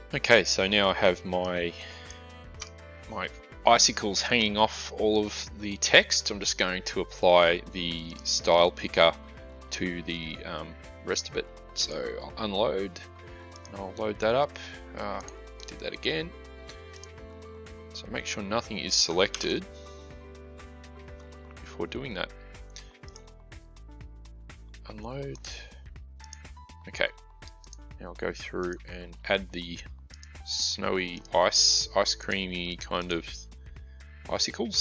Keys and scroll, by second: 19.2 ctrl+d.